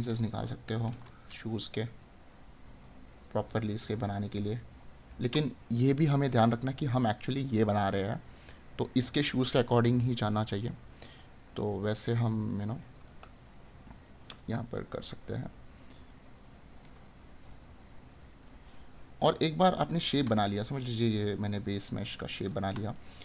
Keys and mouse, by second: 2.1 right click, 16.5 right click, 19.4 right click.